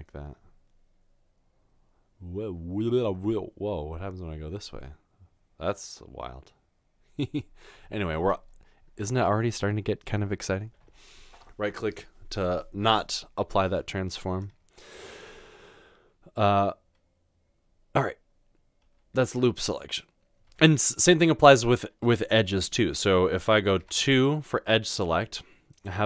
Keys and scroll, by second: 18.9 Tab, 20.5 Tab, 23.8 Tab.